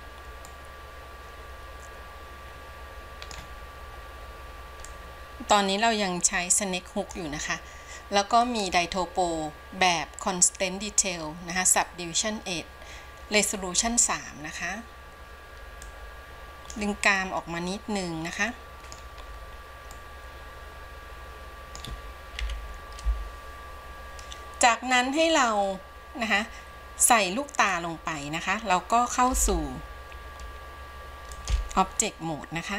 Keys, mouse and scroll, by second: 0.6-3.6 middle drag, 3.6-5.0 scroll up 1, 5.0-17.4 drag, 17.4-19.5 middle drag, 19.5-19.9 scroll down 2, 20.1-22.6 middle drag, 22.6 KP_1, 27.8 scroll down 1, 29.6 ctrl+Tab.